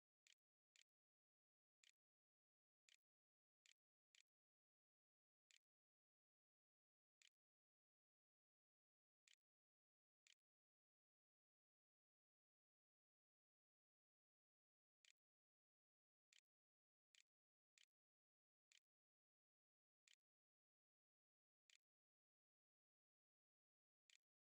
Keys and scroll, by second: 0.0-4.0 typing, 5.3 Tab, 5.4-9.0 typing, 9.8 ctrl+s, 11.5 a, 13.9-20.1 typing, 21.7-24.4 typing.